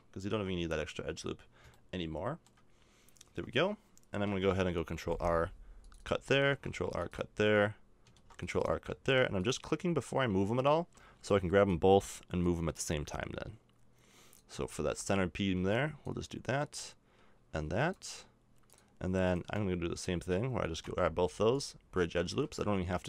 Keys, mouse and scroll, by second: 0.3 a, 0.7 Tab, 3.3 Tab, 4.4 ctrl+r, 6.5 ctrl+r, 7.7 middle click, 8.1 ctrl+r, 9.0 ctrl+r, 11.1 b, 11.9 middle click, 14.5 a, 15.5 b, 16.7-17.9 drag, 20.8 w, 22.3 a, 22.7 Tab.